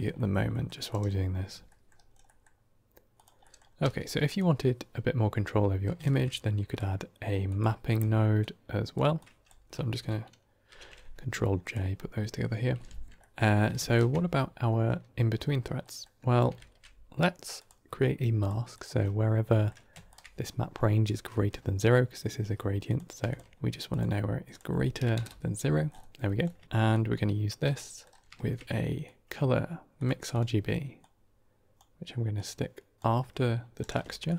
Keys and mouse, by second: 0.1 middle click, 0.8 middle click, 1.6 middle click, 2.2 middle click, 3.3 middle click, 3.7 g, 5.9 shift+a, 8.3-8.8 drag, 9.1 click, 10.6 ctrl+j, 11.5 click, 12.7 F2, 13.2 middle click, 13.2 g, 15.7 middle click, 16.5 shift+a, 19.4 middle click, 20.0 ctrl+shift+click, 22.7 click, 23.2 ctrl+shift+click, 23.5 click, 24.4-25.4 drag, 26.9 click, 27.8 middle click, 28.2 shift+a, 30.9-31.7 drag, 32.3-33.0 drag, 33.8 middle click, 34.2 ctrl+shift+click.